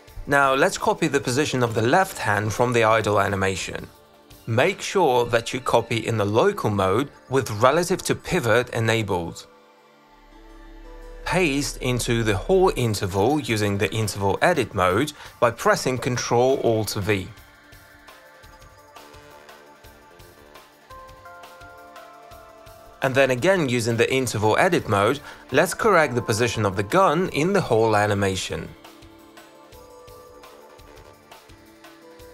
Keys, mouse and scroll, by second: 2.7 click, 3.9 click, 4.5 middle click, 6.7-8.5 drag, 9.2 ctrl+v, 12.2 click, 14.4 click, 15.7 ctrl+alt+v, 19.9 right click, 20.2 click, 21.7 click, 22.1 click, 22.7 q, 22.8 click, 22.9 click, 23.4 click, 23.7 click, 24.4 click, 24.6 shift+click, 25.9 alt+click, 26.8 click, 27.4 e, 28.2 click, 28.8 click, 30.0 click, 30.5 alt+middle click, 30.6 click, 30.8 alt+right click, 31.0 alt+middle click, 31.2 alt+click, 31.6 ctrl+alt+click.